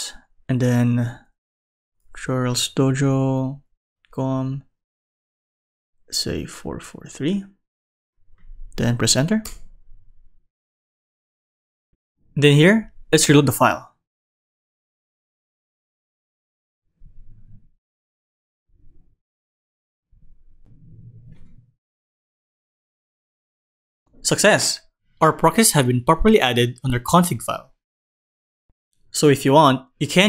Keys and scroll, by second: 22.5 super+Right.